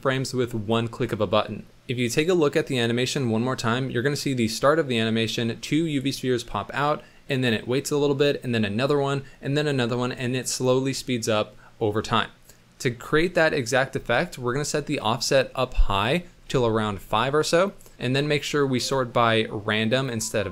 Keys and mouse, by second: 15.0-17.0 drag, 18.8-20.1 drag.